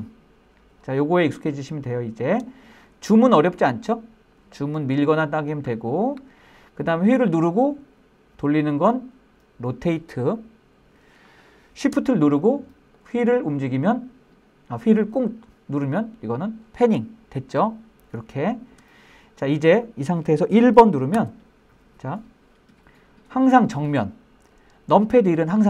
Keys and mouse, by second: 7.4-11.3 middle drag, 13.0-18.8 shift+middle drag, 19.4-20.0 middle drag, 21.2 KP_1.